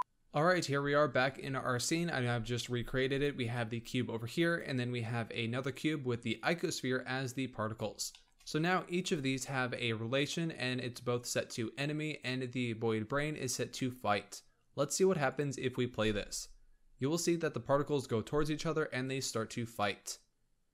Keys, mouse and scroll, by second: 3.0 click, 4.3 click, 6.0 scroll down 2, 7.4 scroll up 2, 8.0-14.0 shift+middle drag, 15.2-15.9 drag, 15.9 space, 19.7-20.7 middle drag.